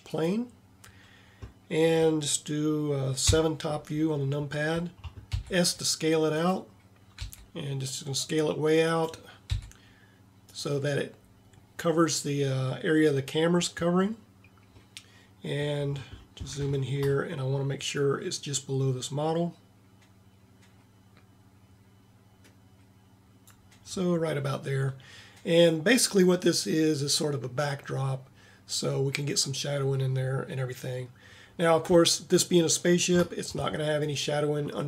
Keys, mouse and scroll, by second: 3.2 KP_7, 5.4 s, 7.2 s, 9.6 s, 14.9-16.4 middle drag, 17.1-18.0 middle drag, 18.0-19.7 drag, 32.4 middle click.